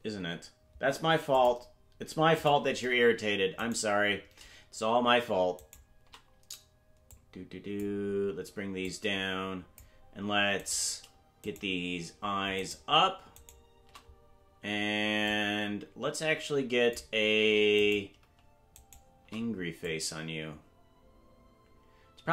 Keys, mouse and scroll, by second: 1.3 click, 2.4 click, 3.7 right click, 5.7 shift+right click, 7.1 click, 8.8-9.8 drag, 10.8 right click, 11.6 shift+right click, 12.8 shift+right click, 15.3-17.0 drag, 17.9 right click, 18.9 shift+right click, 19.8-22.3 drag.